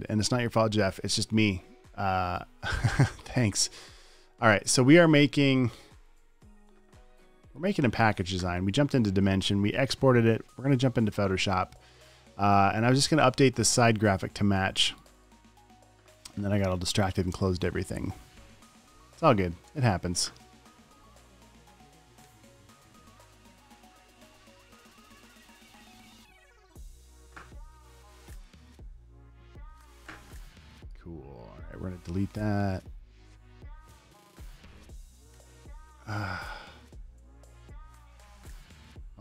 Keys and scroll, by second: 22.7 Return.